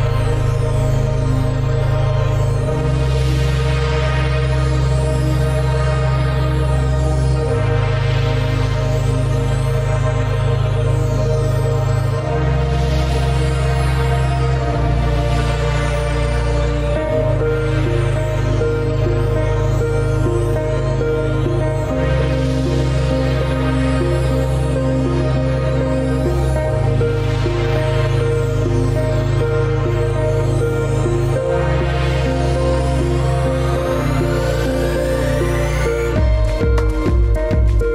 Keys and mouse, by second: 1.2 click, 3.0 click, 5.2 shift+click, 15.1 click, 16.0 click, 17.6 click, 18.3-18.6 middle drag, 18.8-19.3 middle drag, 19.5 g, 22.4-24.6 middle drag, 25.4-26.7 drag, 26.7-29.7 middle drag, 31.0 alt+shift+click, 31.9 alt+shift+click, 32.7-33.4 middle drag, 34.1 ctrl+b.